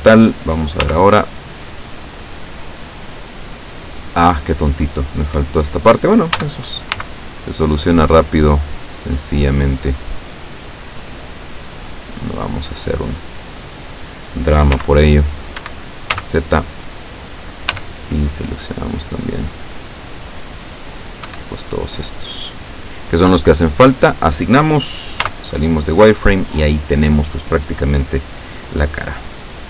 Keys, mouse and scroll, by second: 1.0 z, 6.4 a, 7.0 c, 7.5-12.8 drag, 14.8 z, 15.7 Escape, 16.2 z, 17.8 c, 18.6-21.0 drag, 21.3 Escape, 21.6-23.1 middle drag, 24.0 click, 25.3 z, 28.5-29.2 scroll down 2.